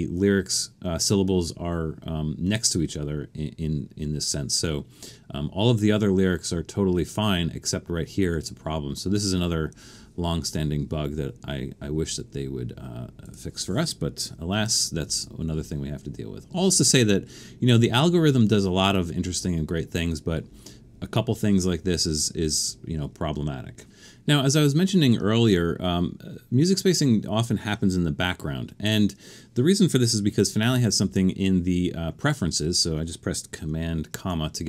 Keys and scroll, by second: 15.1 super+1, 31.0 super+,.